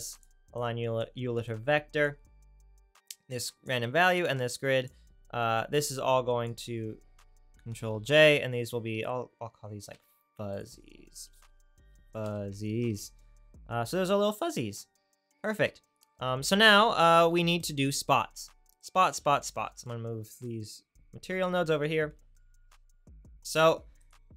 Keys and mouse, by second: 0.2 right click, 0.7 click, 4.4 click, 7.7 ctrl+j, 9.9 n, 12.0 z, 22.0 click, 24.2-24.3 drag.